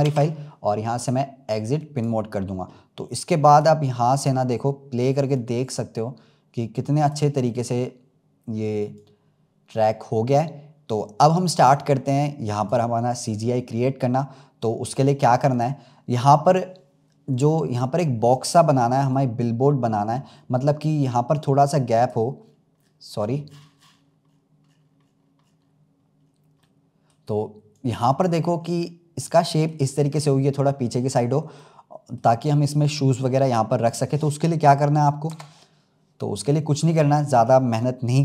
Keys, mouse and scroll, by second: 0.0 ctrl+s, 1.9-4.2 drag, 5.2-7.4 drag, 7.4-8.0 scroll up 3, 8.9-12.0 drag, 13.2-13.6 scroll down 2, 15.4 click, 16.0-16.3 scroll up 2, 17.2 click, 18.4-20.0 middle drag, 20.0-21.2 scroll down 11, 21.2-22.4 drag, 22.4-23.0 scroll down 11, 23.6-24.2 scroll down 59, 24.2-24.9 scroll up 10, 25.3-25.6 scroll up 9, 26.6-27.6 middle drag, 27.6 click, 28.4-29.1 scroll up 2, 29.2-34.6 middle drag, 35.2 KP_0.